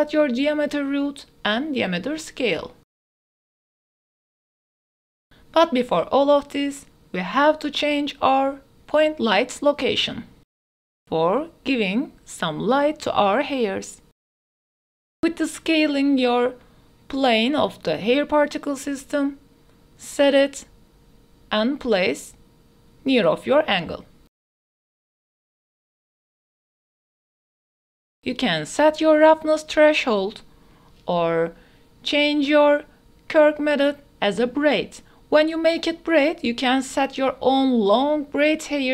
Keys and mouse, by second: 4.5-9.5 drag, 10.2 click, 11.7-13.9 typing, 14.3 drag, 14.8 click, 15.2-17.4 typing, 20.8 g, 21.2 z, 22.2 g, 22.3 x, 23.4-25.6 typing, 26.6 click, 27.3 click, 29.5 click, 31.0 click, 33.7-35.0 drag, 37.9-38.9 drag.